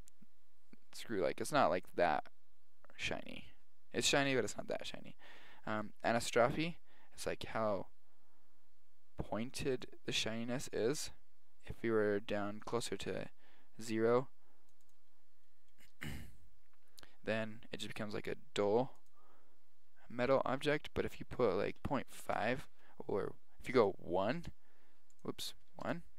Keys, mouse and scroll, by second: 5.8-6.9 drag, 10.3-12.3 drag, 15.0-16.9 drag, 19.1-20.8 drag, 24.0 click.